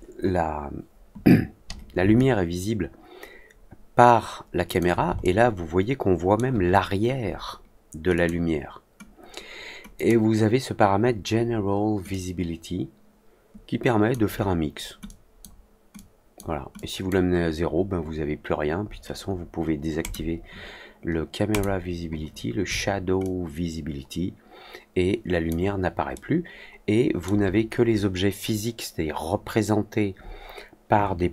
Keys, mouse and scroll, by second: 2.1-4.7 alt+drag, 5.1-6.3 alt+middle drag, 8.1 click, 9.9 click, 12.0-14.0 drag, 15.0-15.3 drag, 15.9-16.3 drag, 16.7-17.0 drag, 19.9 click, 21.4 click, 23.1-25.4 alt+drag, 26.1-27.2 alt+middle drag.